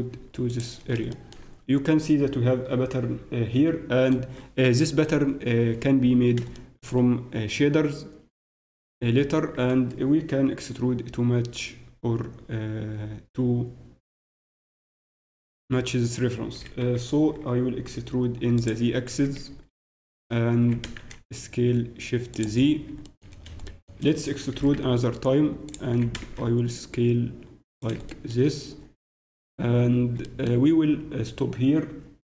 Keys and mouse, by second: 0.8-5.1 middle drag, 5.3-8.3 middle drag, 17.6 e, 19.3 z, 20.6 s, 23.0 click, 24.5 e, 25.9 s, 28.8 click.